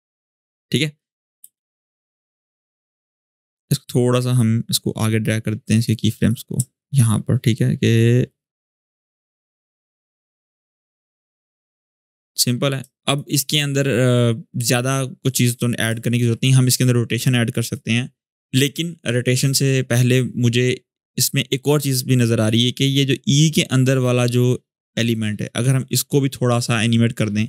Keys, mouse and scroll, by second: 0.7 space, 1.0-1.3 click, 1.1 space, 2.6-5.9 drag, 7.2-13.1 drag, 20.6-22.1 scroll up 1, 22.2 click.